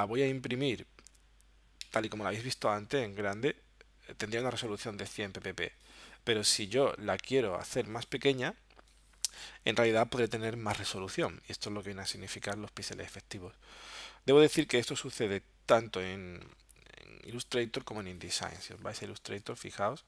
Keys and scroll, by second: 1.9 alt+super+-, 18.7 super+Tab.